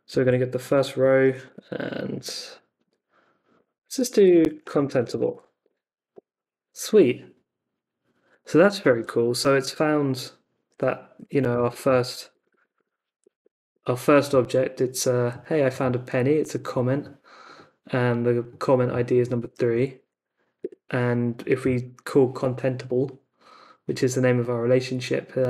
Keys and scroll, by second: 0.2 alt+Left, 2.9 alt+Right, 3.5-5.7 typing, 11.2 Up, 11.5 BackSpace, 13.3 super+k, 13.7 Return, 19.7 Up, 20.6 Return.